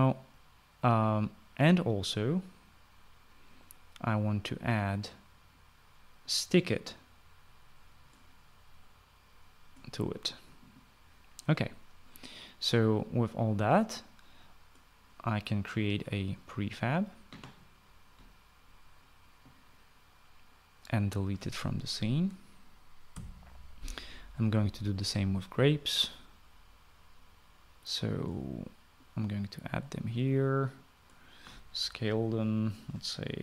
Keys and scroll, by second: 23.9 Delete.